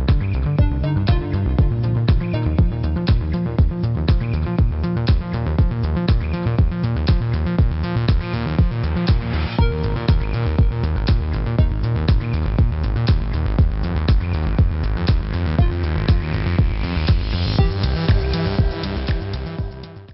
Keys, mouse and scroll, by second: 0.1 click, 1.0 click, 1.3-4.8 typing, 1.9 click, 2.4 click, 4.3 ctrl+KP_1, 4.3 ctrl+1, 4.6 click, 6.1 click, 7.0 z, 7.1 click, 9.4 space, 9.7 click, 12.1 space, 12.5 click, 12.6 space, 14.1 s.